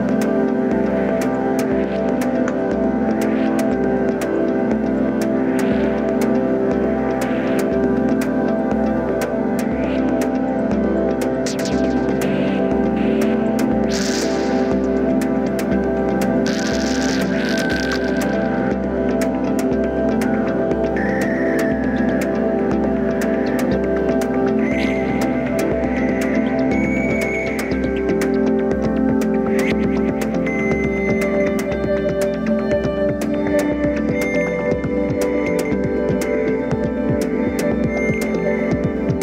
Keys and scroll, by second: 13.1 ctrl+d.